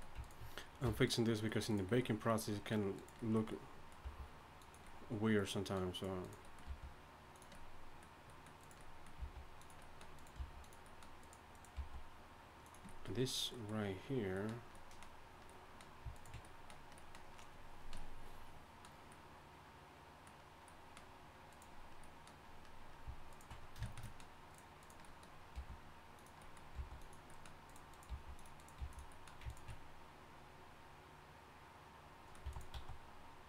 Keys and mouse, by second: 0.8 f, 4.2 g, 5.9-8.3 drag, 6.7 g, 8.6 click, 9.2 g, 10.4 g, 11.8 g, 14.5 click, 15.1 middle click, 16.1-17.3 right drag, 16.5 click, 16.5-19.1 middle drag, 21.5-22.6 right drag, 25.0 click, 25.5 g, 26.7 g, 27.7 click, 28.1 g, 28.8 g, 30.2-31.3 middle drag, 32.4 e, 32.7 s.